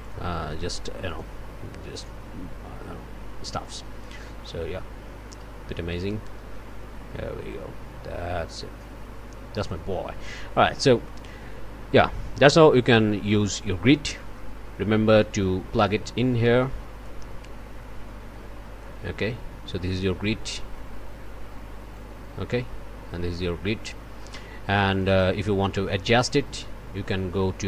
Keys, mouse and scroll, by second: 9.6 click, 10.8 middle click, 10.8 scroll up 1, 11.0 click, 13.1 middle click, 14.2 click, 14.6 middle click, 20.8-22.2 drag, 25.2 click, 26.0 click.